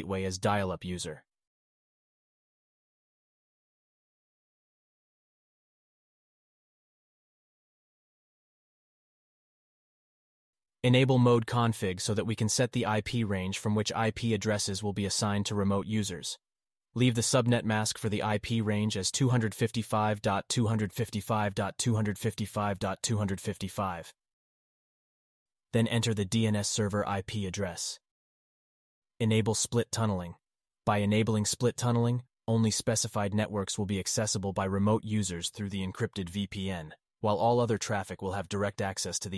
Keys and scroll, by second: 5.9 alt+q.